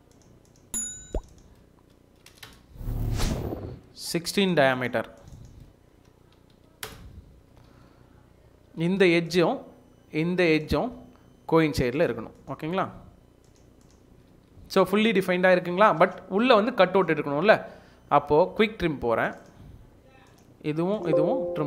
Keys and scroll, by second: 1.8-2.9 typing, 5.0-7.0 typing, 7.5 Escape, 8.0 Escape, 8.9 Escape, 9.1 Escape, 14.1 Escape, 14.3 Escape, 18.4 Escape.